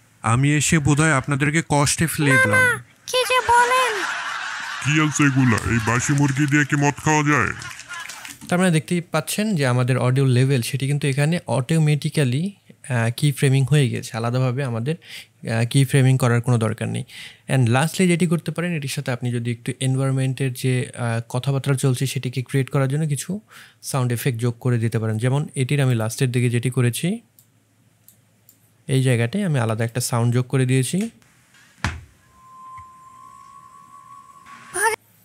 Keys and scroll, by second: 8.2 space, 30.9 space.